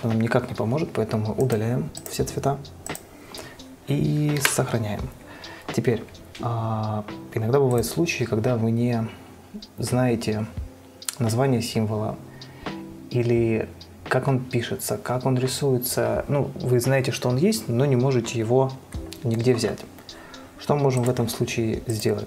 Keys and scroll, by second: 0.0 ctrl+a, 4.7 ctrl+s.